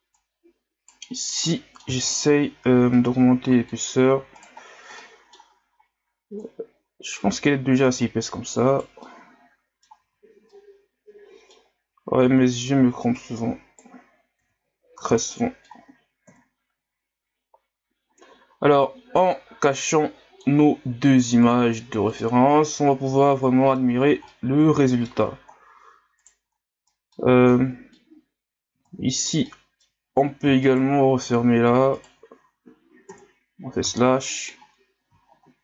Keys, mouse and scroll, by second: 0.2 right click, 1.2 scroll down 2, 1.4-2.0 middle drag, 2.9-4.4 middle drag, 4.4 right click, 4.7 scroll down 2, 5.0-6.4 middle drag, 6.4-8.0 drag, 8.0 right click, 9.0 middle click, 10.0 Tab, 10.5-11.9 middle drag, 11.9 Tab, 12.3 Tab, 13.2 right click, 14.4 Tab, 14.7 scroll down 3, 15.0 a, 15.3-16.2 middle drag, 16.2 KP_1, 17.3-19.3 scroll down 1, 19.3-21.5 drag, 22.1 click, 22.6 scroll down 2, 23.0-23.9 middle drag, 23.9-24.3 scroll up 1, 24.3-25.4 middle drag, 25.4 scroll up 2, 26.2 right drag, 26.5-26.9 scroll up 3, 26.9-28.7 middle drag, 28.7 Tab, 29.5 middle click, 30.1-30.6 scroll up 1, 30.6 alt+right click, 31.9 alt+right click, 33.1 KP_Divide, 34.0-34.3 scroll up 1.